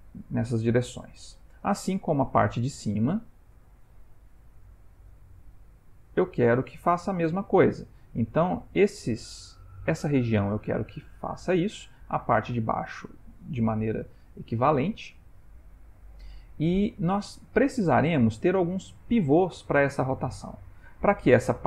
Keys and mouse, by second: 3.6 click, 15.0 click, 20.1 ctrl+middle click, 20.8 ctrl+middle click.